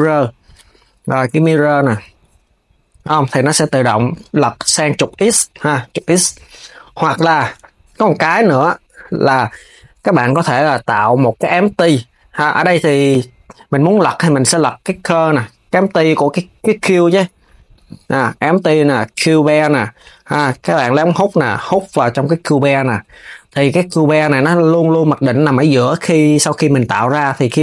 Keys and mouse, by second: 0.8 KP_3, 4.8 click, 5.1 click, 6.7 s, 16.9 x, 17.3 shift+a, 19.7 click, 21.2 click, 23.1 KP_1, 23.9 click.